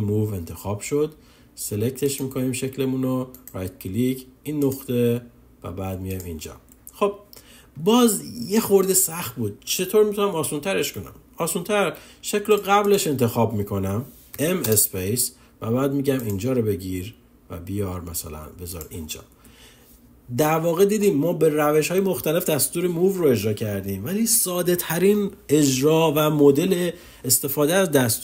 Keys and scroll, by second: 14.5 m.